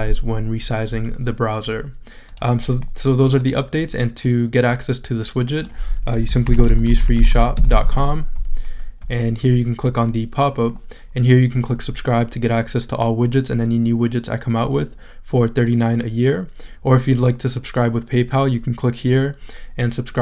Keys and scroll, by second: 6.0-8.3 typing.